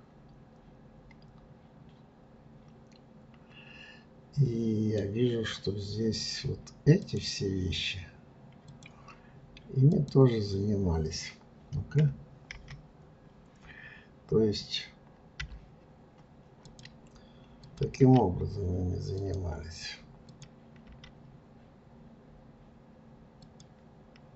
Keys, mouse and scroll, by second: 7.0 click, 8.6 click, 9.9 click, 12.0 KP_3, 13.5-15.1 scroll up 1, 15.4 g, 17.6 click, 18.0 g, 20.2 click, 20.9 g.